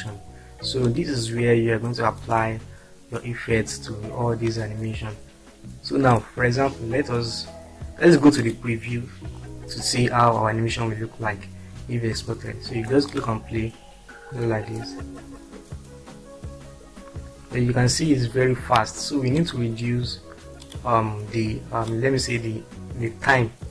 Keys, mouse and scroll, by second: 1.7-3.2 drag, 4.6-5.4 drag, 8.3 click, 19.3 click.